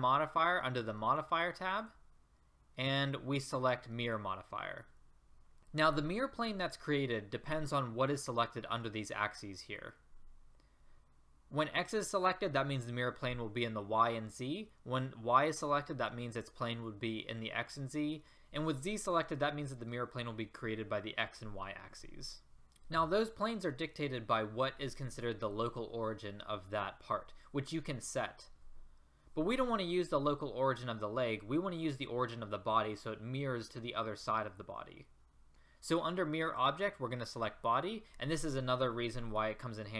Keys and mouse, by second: 36.5-39.9 drag.